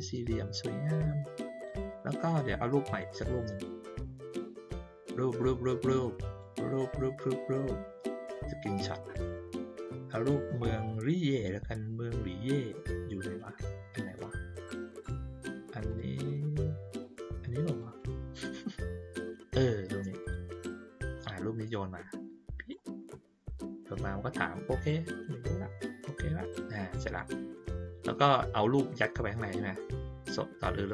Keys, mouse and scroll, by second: 2.8 click, 5.9 click, 8.3 click, 15.8 click, 17.7 click, 17.9 click, 20.2 click, 21.2-22.7 drag, 24.7 click, 27.1-30.8 drag.